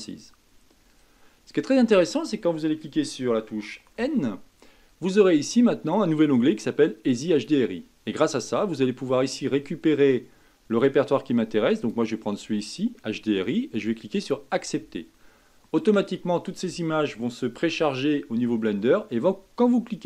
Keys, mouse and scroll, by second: 4.0 n, 7.3 n, 9.5-14.5 drag.